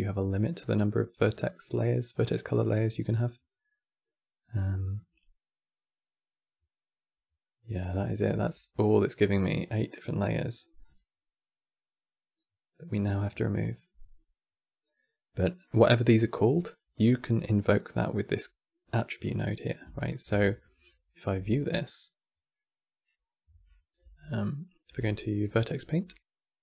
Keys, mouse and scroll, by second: 1.1 click, 4.5-7.6 drag, 8.1-8.9 scroll down 5, 8.9-19.0 drag, 19.1 click, 19.8 ctrl+shift+click, 21.6 click, 23.2 q, 23.7 Tab, 24.6 Tab.